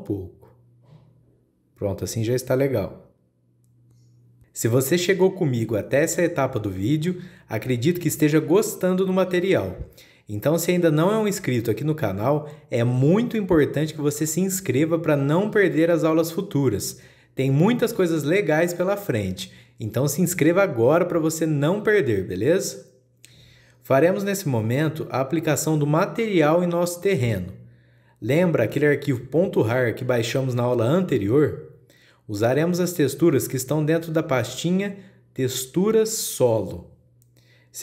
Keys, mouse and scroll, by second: 2.7-6.9 middle drag, 6.9 click, 7.9-13.2 middle drag.